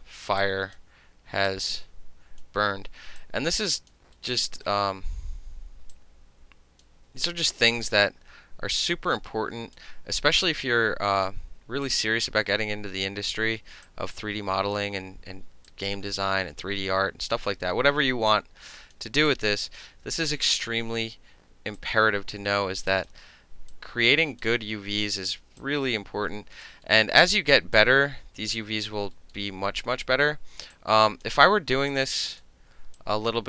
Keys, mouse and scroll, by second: 0.4 click, 1.5-2.4 drag, 3.2 click, 4.4 alt+right click, 5.9-6.8 drag, 7.3 alt+right click, 8.9-9.8 drag, 10.3 middle click, 10.5-11.3 drag, 11.3-11.9 middle drag, 11.9-13.3 drag, 13.3-13.9 middle drag, 13.9 click, 15.7-17.4 drag, 18.3 click, 19.3-19.7 drag, 20.2 alt+middle click, 20.5 alt+right click, 21.8 click, 22.9 alt+middle click, 23.7 click, 25.6-26.7 drag, 26.9 alt+middle click, 27.8-28.9 drag, 29.0 alt+middle click, 29.3-30.7 alt+middle drag, 30.7-31.3 alt+drag, 31.3-31.9 alt+middle drag, 31.9-32.4 alt+drag, 32.4-33.0 alt+middle drag, 33.0-33.4 alt+drag.